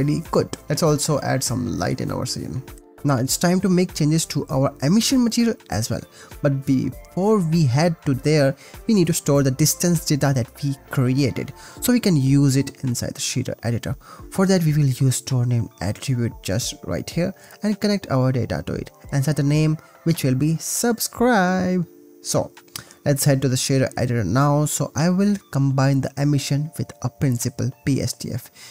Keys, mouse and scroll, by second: 1.8 click, 2.8 click, 3.4 click, 4.2 click, 4.6 g, 4.9 click, 5.2 click, 5.6 click, 6.3 click, 6.7 click, 7.2 g, 8.2 click, 8.8 g, 9.3 drag, 10.0 click, 10.3 click, 10.7 shift+a, 14.7 click, 15.4-16.2 drag, 16.5 click, 17.3 click, 17.5 click, 18.4-19.0 drag, 19.1 click, 21.1 click, 22.0 ctrl+c, 23.4-24.6 drag, 25.4 click, 26.2 click, 26.3 shift+a, 28.3 Return.